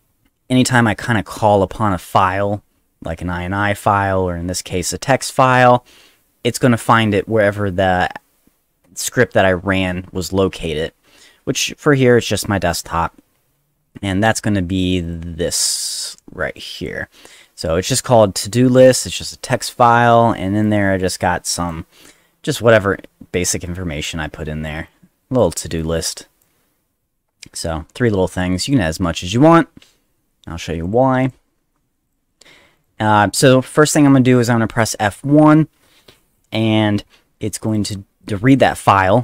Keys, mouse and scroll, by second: 14.2 click, 15.0 click, 15.8 click, 16.8 click, 18.8 click, 18.9 click, 20.6-21.7 drag, 23.7 click, 24.9 click, 25.8 click, 28.6 click, 30.8 click, 31.2 click, 32.1 click, 32.8 click, 34.1 click, 34.7 click, 37.7 click, 37.8 click.